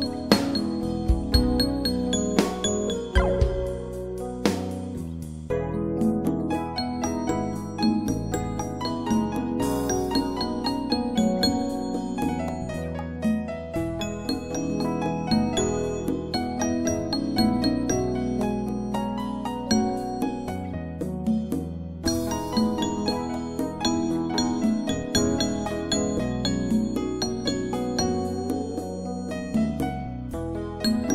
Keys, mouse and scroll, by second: 0.0 click, 3.0 click, 9.4 click, 14.4 click, 17.7 click, 22.2-23.4 typing, 25.1 shift+b, 27.5 click, 28.5 right click, 28.9 click.